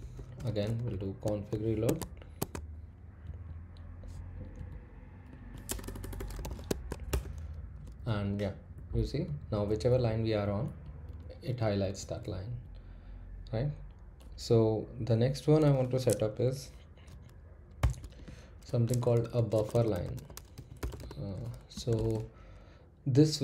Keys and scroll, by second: 0.0-1.7 typing, 1.8 Tab, 2.4 Tab, 3.2 typing, 4.1 Down, 4.6 Left, 5.3 Right, 5.7 BackSpace, 5.8-7.1 BackSpace, 8.7 Up, 9.2 Page_Down, 9.6 Page_Up, 10.0 Page_Down, 10.4 Page_Up, 17.8-21.9 typing.